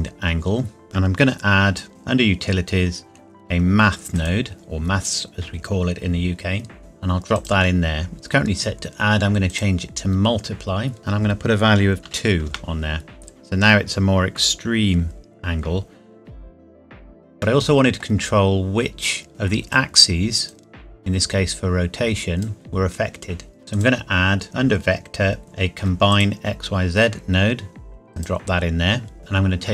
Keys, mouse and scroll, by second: 4.1 click, 4.3 click, 7.3 click, 12.0 KP_2, 12.4 KP_Enter, 17.4 middle click, 18.3 scroll down 1, 19.3 click, 26.1 click, 29.2 middle click.